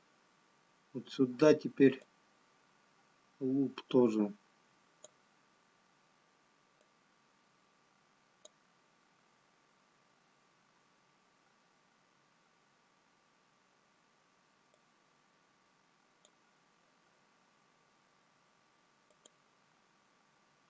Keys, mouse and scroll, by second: 2.1 click, 8.4 click, 16.1 click, 19.2 click, 20.5 scroll down 3.